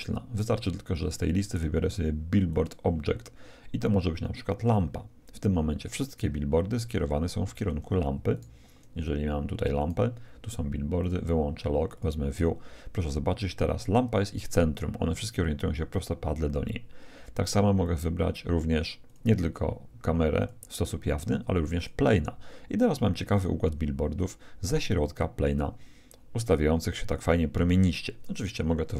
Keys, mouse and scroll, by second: 2.5-4.4 drag, 5.9-9.3 middle drag, 8.3-11.0 right drag, 11.0-13.6 drag, 11.3 middle click, 11.3 right click, 17.8-19.6 drag, 20.4-22.1 drag.